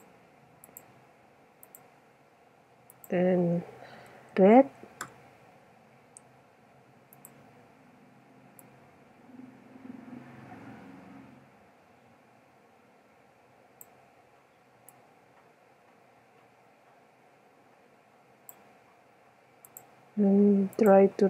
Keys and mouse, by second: 4.7 click, 7.2 click, 9.0-10.6 middle drag, 11.1-12.2 middle drag, 14.9-15.9 middle drag, 17.5-18.6 middle drag, 19.1-19.5 middle drag, 19.7 middle click, 19.8-20.2 drag.